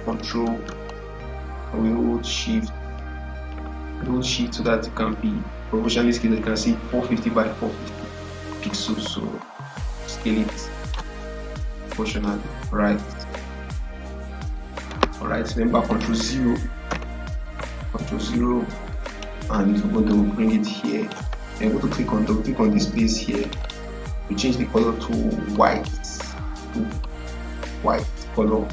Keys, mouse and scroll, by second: 0.8-10.8 shift+drag, 13.2 ctrl+-, 15.8 click, 16.8 ctrl+0, 19.0-23.3 drag, 23.3-28.7 drag.